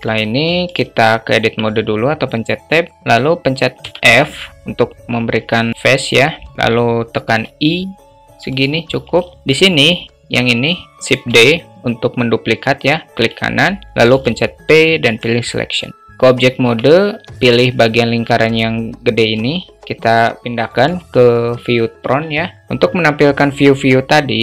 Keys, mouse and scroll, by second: 0.9 Tab, 3.3 f, 6.7 i, 9.1 alt+shift+middle click, 10.7 shift+d, 13.8 p, 16.1 Tab.